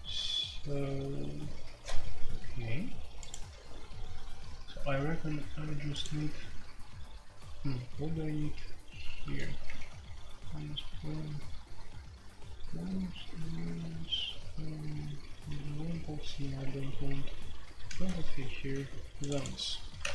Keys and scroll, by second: 15.0 shift+Page_Down, 15.4 shift+Page_Down, 15.9 shift+Page_Down, 16.3 shift+Page_Down, 19.9-20.1 typing.